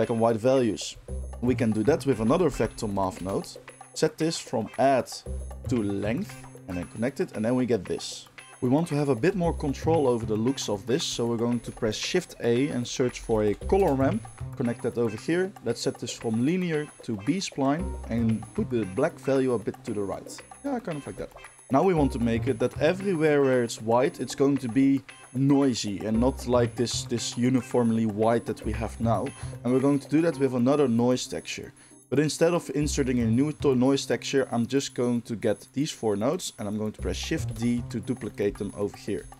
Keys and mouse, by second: 1.2 shift+a, 3.8-4.8 middle drag, 4.8-6.5 drag, 6.5-16.4 ctrl+shift+middle drag, 11.5 shift+a, 16.4-21.5 drag, 21.5-34.1 middle drag, 34.1-38.4 drag, 37.4 shift+d, 38.4-39.3 middle drag, 38.4 r.